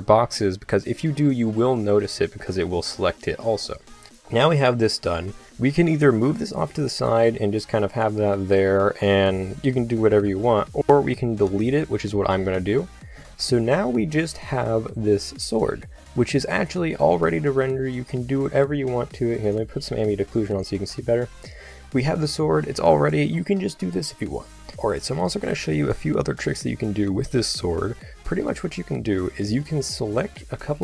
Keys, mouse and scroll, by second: 6.3 g, 10.8 ctrl+z, 11.4 x, 16.3 z, 17.2-19.5 middle drag, 21.7 click, 29.8 click.